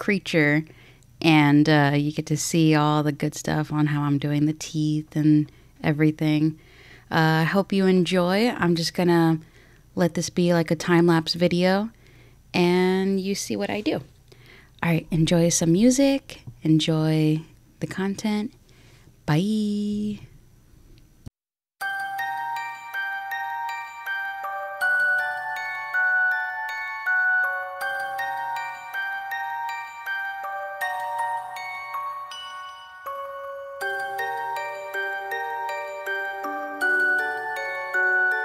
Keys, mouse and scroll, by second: 1.5 double click, 1.8 ], 2.5 double click, 4.3 double click, 4.8 double click, 5.6 double click, 11.5 double click, 14.1 double click, 15.8-17.4 typing, 21.1 right click, 23.3 double click, 23.8 ctrl+d, 25.3 double click, 28.2-28.6 scroll down 1, 28.9 double click, 29.4 double click, 29.7 double click, 30.8 double click.